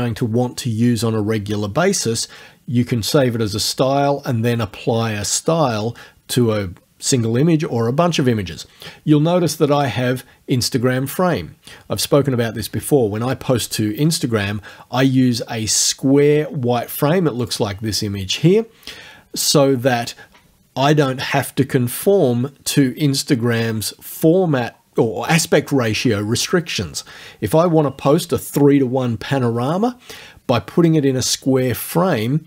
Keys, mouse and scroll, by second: 9.8 click, 17.4 click.